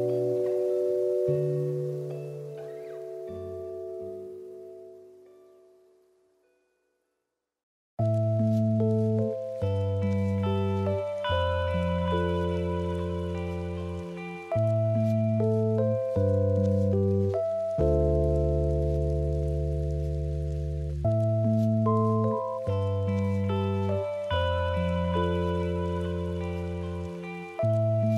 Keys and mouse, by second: 4.9-5.6 middle drag, 6.1-7.1 middle drag, 9.2 middle click, 11.3 click, 11.8 click, 13.6 middle click, 15.0 click, 15.4 click, 15.8 middle click, 17.4 click, 20.5 click, 21.2 r, 23.6 s, 25.1 g, 26.8 shift+middle click, 27.2 shift+middle click.